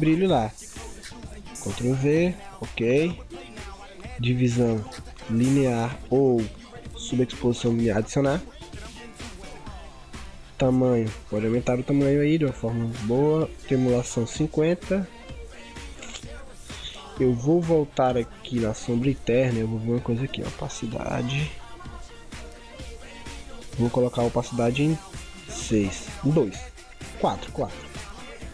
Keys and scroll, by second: 1.9 ctrl+v.